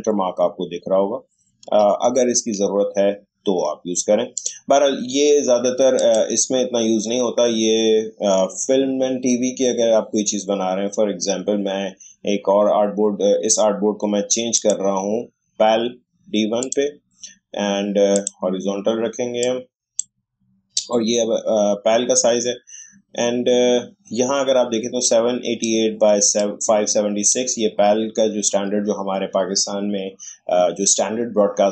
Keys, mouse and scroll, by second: 0.5-1.5 shift+scroll down 1, 2.2-2.5 alt+scroll down 1, 4.4 click, 14.5 click, 16.4-22.3 drag, 25.0-29.7 drag.